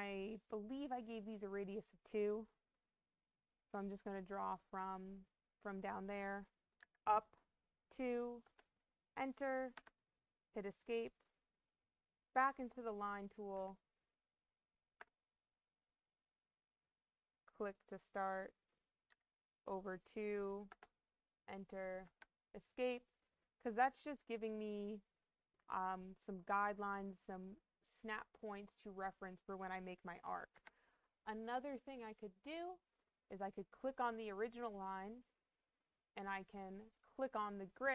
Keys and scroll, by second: 6.7 2, 8.3 Return, 9.6 Escape, 14.9 Return, 19.0 2, 20.6 Return, 21.9 Escape, 30.4 Escape.